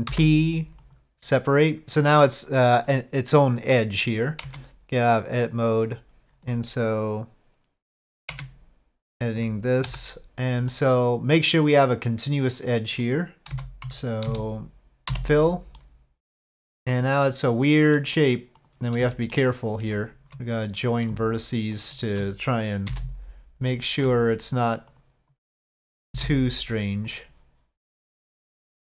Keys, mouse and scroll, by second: 0.1 p, 4.4 Tab, 8.3 Tab, 9.9 KP_Divide, 10.7-13.0 middle drag, 13.4 z, 14.3 a, 15.1 f, 15.8-18.0 middle drag, 18.6 click, 19.1 shift+click, 19.9 g, 19.9 j, 20.0 shift+click, 20.6 click, 22.9 j, 24.9 shift+click, 26.1 j, 27.0 click.